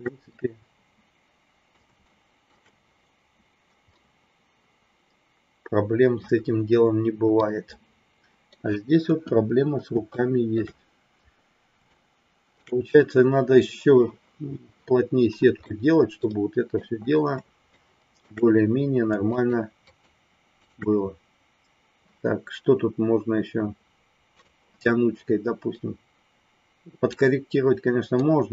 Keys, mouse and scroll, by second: 0.3-1.7 middle drag, 2.0 shift+middle click, 3.9-6.2 middle drag, 7.4-8.5 middle drag, 9.1 KP_1, 10.0 shift+middle click, 11.9 shift+middle click, 15.6-16.7 middle drag, 17.7 shift+middle click, 19.2 shift+click, 19.8 shift+click, 20.5 shift+click, 25.7-27.1 drag, 28.1-28.5 drag.